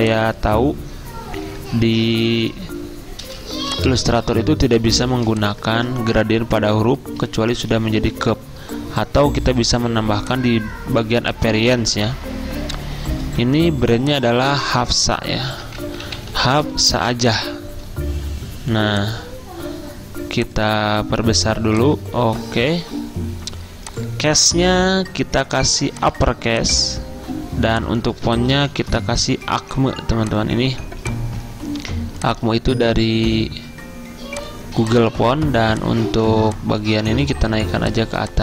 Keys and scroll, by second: 5.0-5.7 typing, 5.8 ctrl+a, 13.5 t, 14.5 ctrl+a, 15.4-17.7 typing, 20.3-21.1 typing, 28.4-29.3 typing, 32.5-33.3 typing.